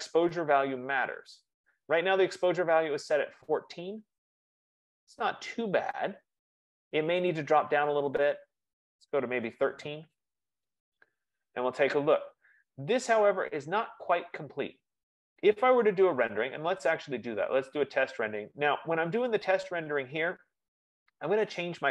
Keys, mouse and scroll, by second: 1.2 F15, 7.9-12.9 drag, 9.2-10.1 typing, 20.5 click, 21.3-21.9 scroll.